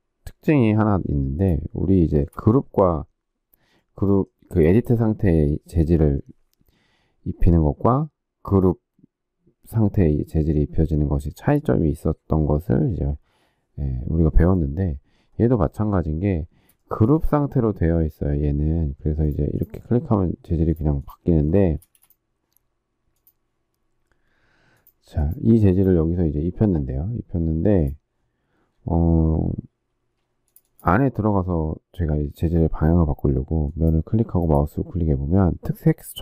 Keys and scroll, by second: 21.7 space, 29.8 space.